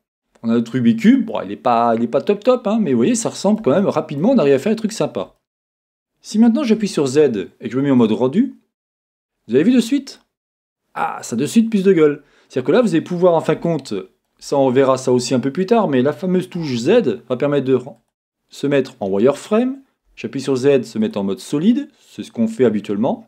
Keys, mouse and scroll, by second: 0.2 middle click, 0.2-1.2 scroll up 2, 0.4 middle click, 1.2 scroll down 2, 1.3-18.1 middle drag, 2.7 scroll down 1, 4.2 scroll up 2, 4.9-5.3 scroll down 2, 5.6 scroll up 1, 6.2 scroll up 1, 6.8 scroll down 1, 6.8 z, 9.1-9.6 scroll up 2, 12.0-13.7 scroll down 2, 16.6 z, 21.2 middle click.